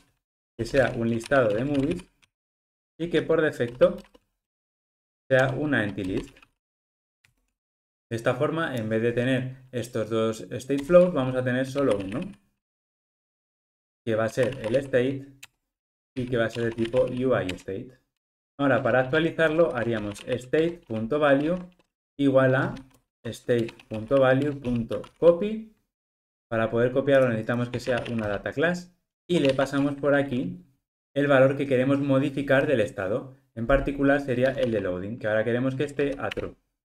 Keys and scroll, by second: 7.3 Return, 12.9 Return, 17.6 Return, 18.4 super+z, 20.7 Return, 22.0 alt+shift+Left, 23.6 Return, 36.4 Return.